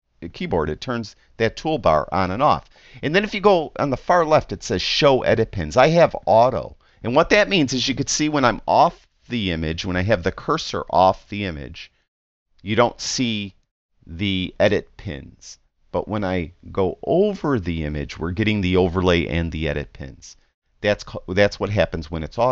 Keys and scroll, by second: 0.8 t.